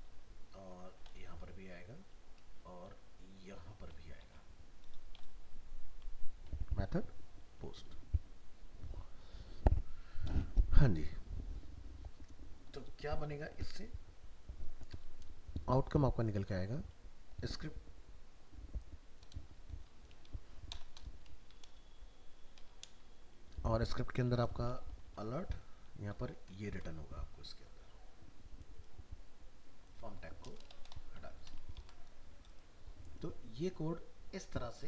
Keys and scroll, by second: 1.1 ctrl+v, 4.2 ctrl+v, 26.7 ctrl+s, 31.8 ctrl+s.